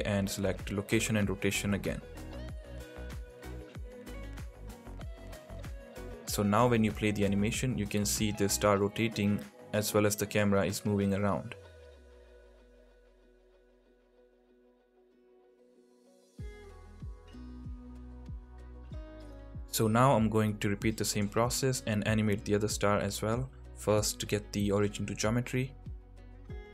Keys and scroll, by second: 3.1 k, 7.3 space, 8.7 space, 15.9 space.